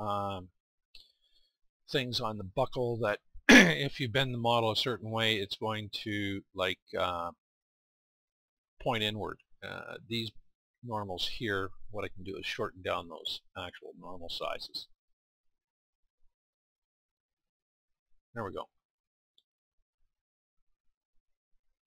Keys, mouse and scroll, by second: 0.2-5.6 middle drag, 10.9-14.3 middle drag, 14.3 click, 17.5-20.2 middle drag.